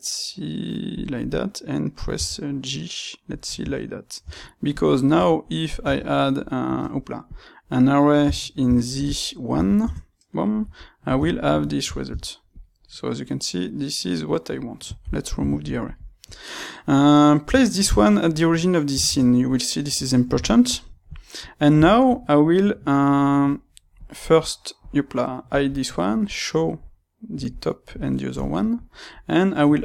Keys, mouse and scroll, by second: 1.2 click, 2.1 g, 3.3 click, 3.5 Tab, 4.6 click, 7.3 space, 11.2-15.8 ctrl+middle drag, 16.2 click, 16.5-23.9 middle drag, 18.8 alt+g, 23.9 click, 24.3 click, 27.2 click, 27.8 click, 28.4-29.8 shift+middle drag.